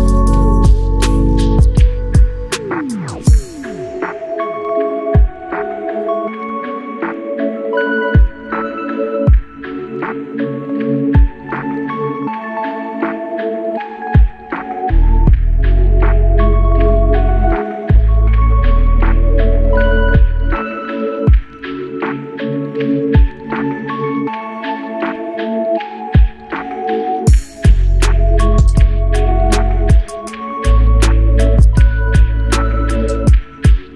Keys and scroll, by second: 29.0 ctrl+8.